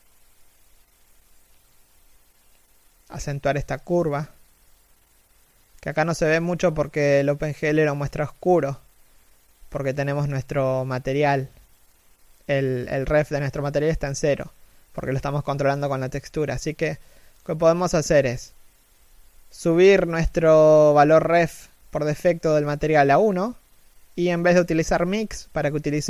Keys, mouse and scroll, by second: 0.4 middle click, 0.9 z, 1.2-1.6 scroll down 1, 1.6 middle click.